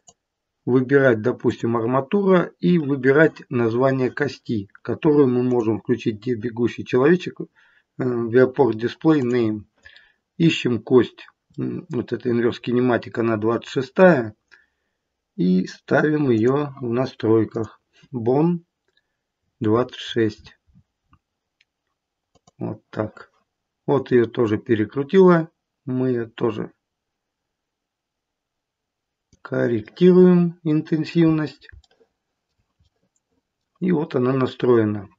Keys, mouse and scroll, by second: 5.4 click, 9.1 click, 10.3 scroll up 2, 11.4 middle click, 16.3 click, 17.4 click, 24.4 click, 29.8 middle click, 30.0 middle click, 31.2-31.6 scroll down 2, 31.7 shift+middle click, 32.8 middle click.